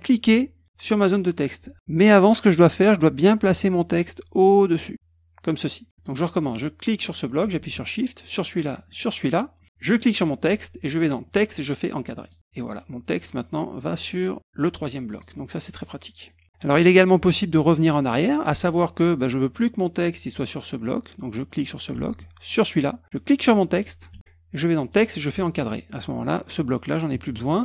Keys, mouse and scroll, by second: 1.0 shift+click, 2.2 click, 3.2 click, 3.9-4.9 drag, 5.9 click, 6.9 click, 8.2 shift+click, 8.9 shift+click, 9.9 shift+click, 11.2 click, 12.2 click, 15.1 click, 21.5 click, 22.5 shift+click, 23.6 shift+click, 24.1 click, 24.8 click, 25.5 click, 25.8 click, 27.3 click.